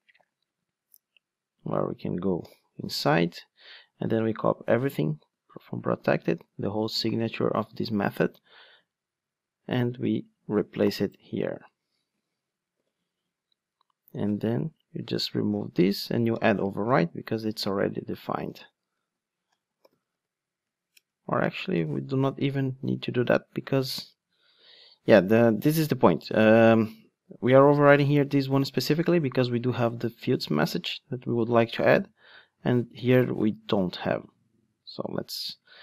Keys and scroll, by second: 0.2 super+c, 2.4 super+b, 8.0 super+c, 8.4 ctrl+Tab, 12.8 super+v, 15.5 super+x, 15.8 Tab, 20.9 Return, 21.9 ctrl+Tab, 27.0 ctrl+Tab.